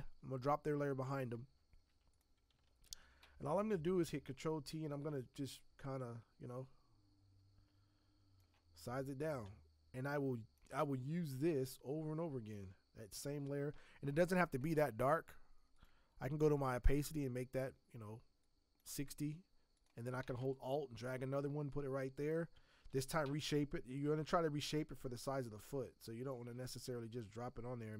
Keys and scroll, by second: 2.8 ctrl+t, 22.9 ctrl+t.